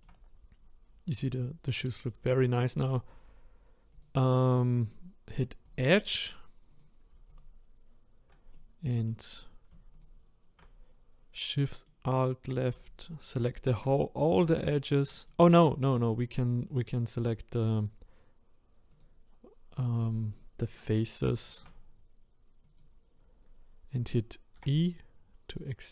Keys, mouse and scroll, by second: 0.2-0.8 scroll up 3, 0.8-1.1 scroll down 3, 1.1-3.1 middle drag, 3.1 click, 3.3-4.0 scroll up 1, 4.0 click, 5.6 click, 6.8 click, 7.4 alt+click, 8.5-10.0 middle drag, 10.0 alt+shift+click, 11.9-13.5 middle drag, 13.5 alt+shift+click, 14.0-16.8 middle drag, 16.8 click, 17.6 click, 18.9 click, 19.8 click, 20.3 shift+click, 20.7 shift+click, 21.4 shift+click, 24.6 e.